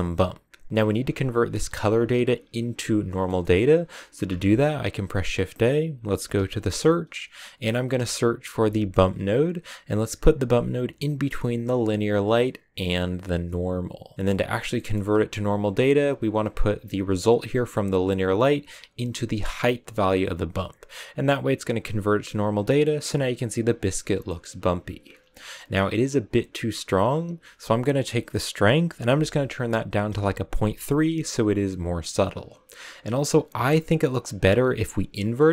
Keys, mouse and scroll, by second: 0.7 KP_0, 14.0 click, 14.1-18.6 middle drag, 18.6-19.9 drag, 22.7-23.4 scroll up 1, 23.4 scroll up 1, 23.5-24.3 scroll down 1, 24.3-25.3 middle drag, 25.3-26.7 scroll up 3, 26.7-28.5 scroll up 1, 28.5-30.0 scroll up 1, 30.0 click, 35.0 click.